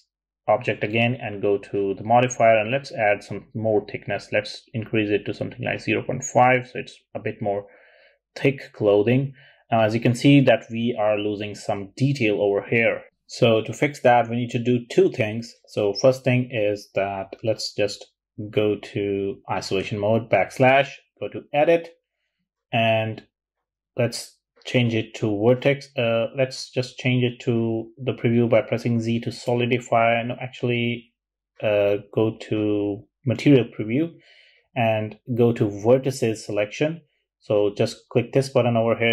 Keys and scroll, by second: 4.5-16.0 typing, 18.8-19.5 typing, 25.8 z, 29.0 z, 31.1 z.